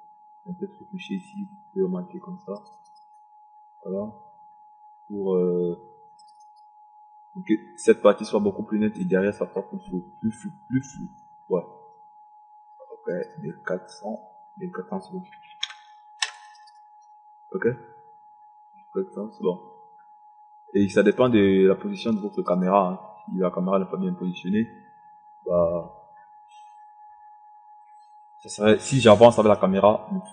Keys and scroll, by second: 15.9 KP_1, 16.0 KP_4, 16.4 0.